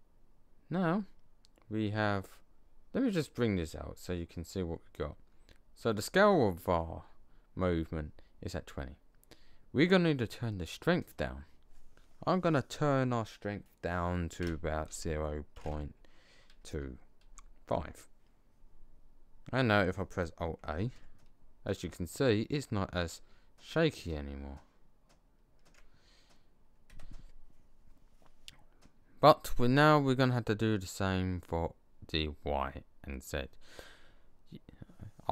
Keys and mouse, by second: 3.5 middle click, 20.8 alt+a, 26.8 Escape.